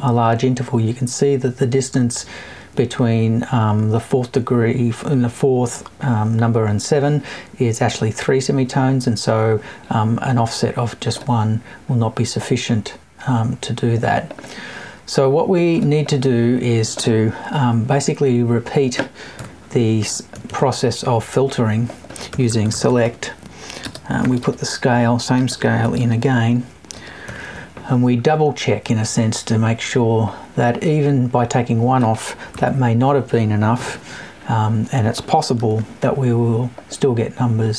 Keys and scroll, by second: 19.3 BackSpace, 20.3 super+BackSpace, 32.5 Right, 33.9 Left.